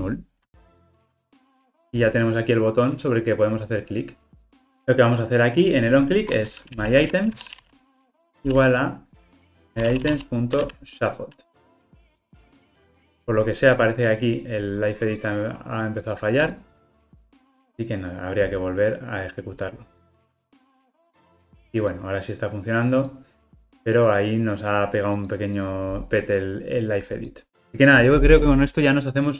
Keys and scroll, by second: 11.6 Return, 17.2 ctrl+r.